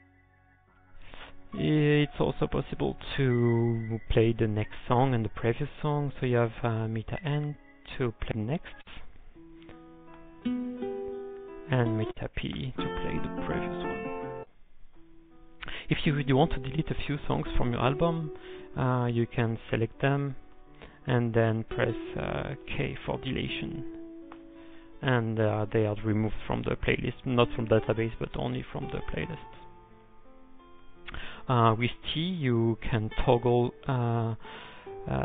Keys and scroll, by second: 0.1 ctrl+p, 0.5 ctrl+p, 0.7 u, 1.0 u, 1.3 u, 1.9 u, 7.7-8.4 typing, 11.1-11.9 typing, 13.7 ctrl+p, 17.4-18.1 typing, 18.3 ctrl+n, 18.7 ctrl+n, 18.8 ctrl+n, 20.2-22.1 typing, 24.0 k, 25.8-26.5 typing.